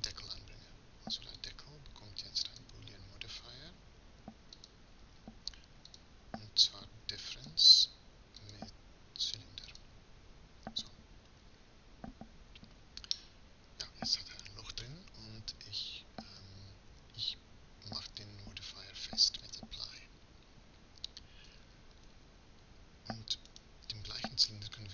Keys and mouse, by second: 7.5-12.6 drag, 13.2-17.7 middle drag, 21.5-23.8 middle drag, 23.8-24.9 right drag.